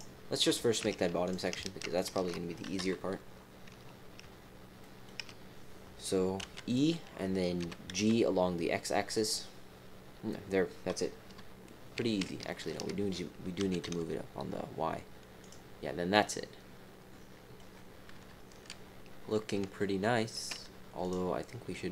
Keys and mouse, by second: 1.2 click, 1.9 alt+shift+click, 2.7 KP_1, 4.2 shift+middle click, 4.8 click, 6.4 e, 7.6 g, 11.2 KP_3, 12.2 shift+middle click, 13.5 g, 16.1-17.6 middle drag, 18.1 KP_3, 19.7 shift+middle click, 21.0 click.